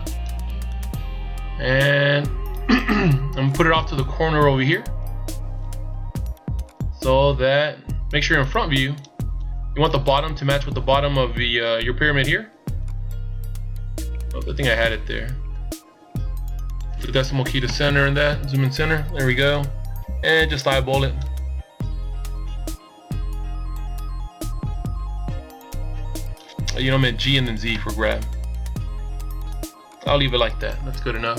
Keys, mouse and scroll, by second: 3.3 click, 6.6 click, 12.7 click, 17.6 KP_Decimal, 19.2 click, 26.8 g, 30.5-31.3 scroll down 1.